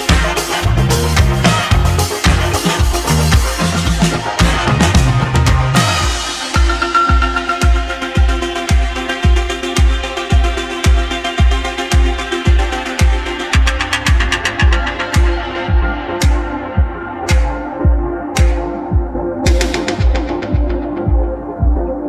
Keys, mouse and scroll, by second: 1.7 ctrl+z, 2.0 ctrl+z, 2.3 ctrl+z, 2.6 ctrl+z, 2.9 ctrl+z, 3.3 ctrl+z, 4.7 click, 5.3 Tab, 6.5 a, 7.6 click, 8.1 click, 8.5 Tab, 8.9 click, 9.4-11.2 middle drag, 11.2 `, 12.5-12.9 scroll down 2, 14.6-15.7 scroll down 2, 15.7 Tab, 16.7 1, 17.3 Left, 19.1 e, 21.0 scroll down 2, 21.6-22.0 scroll down 3.